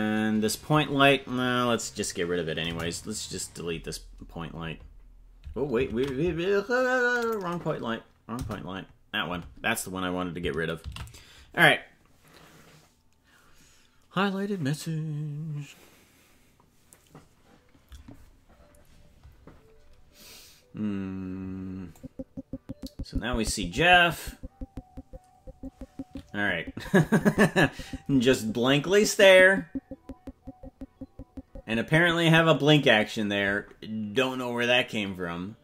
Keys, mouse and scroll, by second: 2.9 Delete, 6.4 ctrl+z, 7.5 click, 8.7 Delete, 13.0 ctrl+s, 22.0-33.1 drag.